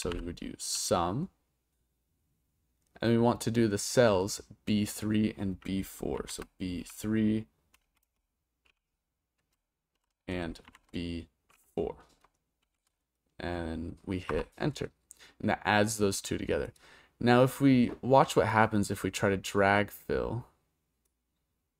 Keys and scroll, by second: 0.0-0.7 typing, 6.2 shift+b, 6.8 3, 7.8 BackSpace, 8.1 BackSpace, 8.7 3, 10.0 shift+;, 10.7 shift+b, 11.5 4, 12.6 shift+0, 14.3 Return.